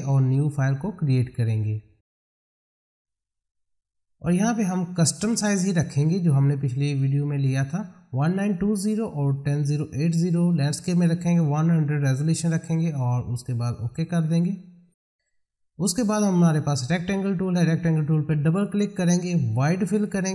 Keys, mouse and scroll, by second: 7.0-11.8 drag, 13.9 click, 18.4 click.